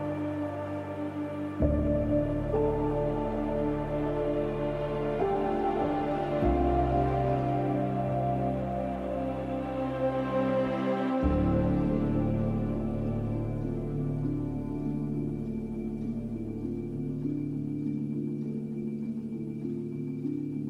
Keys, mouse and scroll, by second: 2.8 scroll down 1, 2.9 scroll up 1, 3.2 click, 4.3 scroll down 1, 4.6-5.0 scroll up 1, 5.2 click, 5.7 scroll down 1, 5.9 scroll, 5.9 scroll up 1, 6.4 [, 6.5 click, 7.8 ], 7.9 click, 8.0 ], 8.1 click, 9.9-10.7 typing, 10.2 click, 10.7 click, 12.6-13.3 typing, 12.9 click, 13.3 click, 15.3-16.5 typing, 15.5 click, 16.1 click, 16.4 click, 16.6 click, 17.5 [, 17.6 click, 18.1 ], 18.3 click, 18.6 scroll down 1, 19.2-19.8 scroll down 1, 19.8 scroll up 1, 20.4 click.